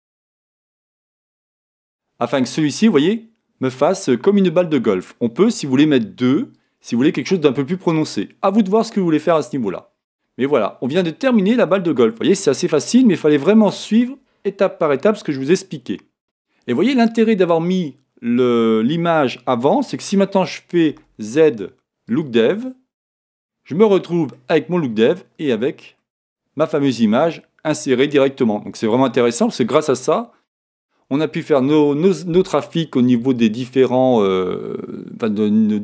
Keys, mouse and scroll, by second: 1.1-2.3 drag, 2.3-7.0 middle drag, 7.0-10.9 drag, 10.9-35.8 middle drag, 10.9-11.7 scroll down 2, 22.7 z, 24.6-25.5 scroll up 2, 25.5 scroll up 1, 25.6-26.0 scroll down 2, 28.8-29.3 scroll down 2.